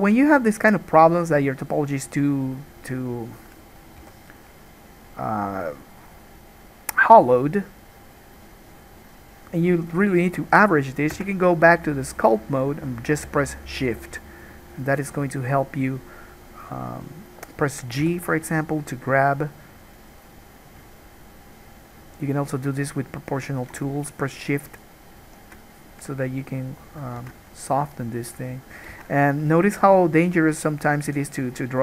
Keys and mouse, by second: 0.4-3.5 middle drag, 3.5-14.0 drag, 4.2 g, 11.3 Tab, 14.0-31.8 shift+middle drag, 18.2 g, 27.4 ctrl+z, 29.1 ctrl+z.